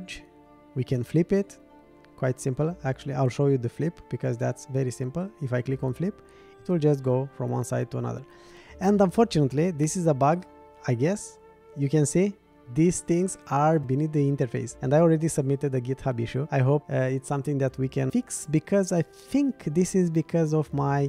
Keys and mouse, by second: 2.6-3.9 middle drag, 5.9 click, 7.6 click, 10.4-18.1 drag, 19.1-20.2 drag.